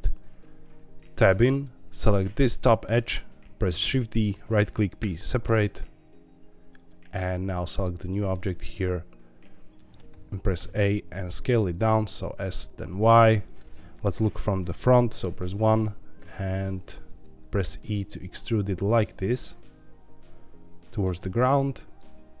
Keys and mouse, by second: 1.5 click, 3.6 shift+d, 4.9 p, 5.4 Tab, 8.3 Tab, 9.2 1, 9.8 middle click, 10.1 a, 10.5 s, 11.0 y, 13.4 click, 15.4 KP_1, 16.1 r, 17.1 Escape, 17.6 e, 20.9 click, 21.1-22.3 middle drag.